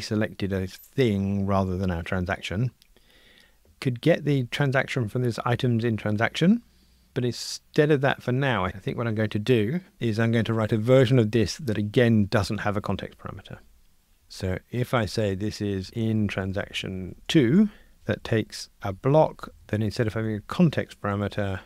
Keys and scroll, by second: 8.3 super+b, 15.0 super+d, 19.4 alt+shift+Right, 21.1 Delete.